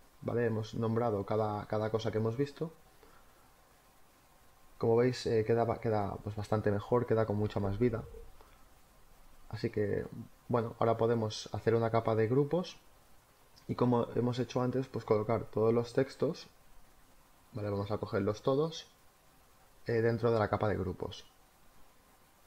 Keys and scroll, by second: 13.7-15.0 typing.